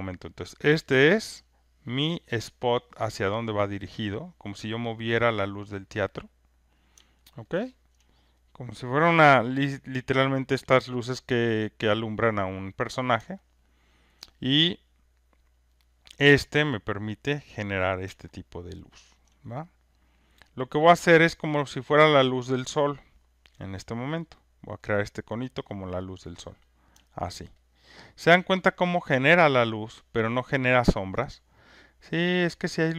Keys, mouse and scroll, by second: 0.3 alt+middle click, 3.3 alt+right click, 6.7 click, 7.3 alt+right click, 7.8 alt+click, 9.1 click, 9.9 alt+right click, 10.5 alt+click, 12.9 click, 14.1 alt+click, 17.6 click, 18.6 alt+middle click, 19.1 alt+right click, 21.2 click, 24.3 click, 25.2 click, 26.8 click, 27.5 alt+right click, 27.8 alt+click, 27.9 alt+click, 28.3 alt+middle click, 29.7 alt+click, 32.4 alt+click.